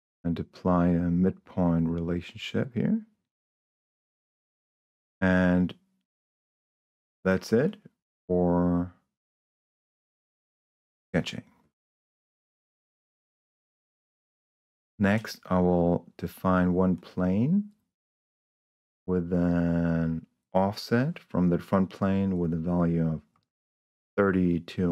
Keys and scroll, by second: 4.4 Escape, 23.5 2.